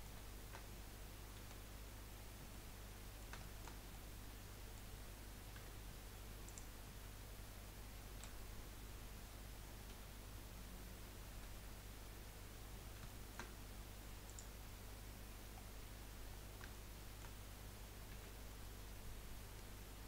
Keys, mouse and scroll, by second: 1.5 KP_1, 2.5-5.6 middle drag, 5.6 3, 6.4 click, 8.2 KP_1, 9.9 KP_2, 11.3 KP_3, 13.0 shift+scroll up 1, 13.2-14.2 shift+middle drag, 14.2-15.4 drag, 15.4 scroll up 1, 15.6 scroll down 1, 15.9-16.7 scroll up 4, 16.7-18.1 shift+middle drag, 18.1 1, 18.6-20.0 scroll up 3.